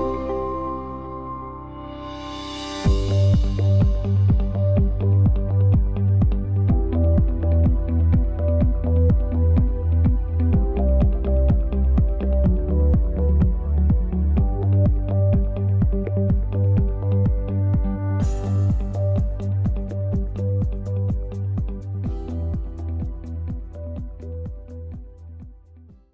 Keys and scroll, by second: 5.7 space, 13.5 ctrl+s, 15.3 ctrl+s.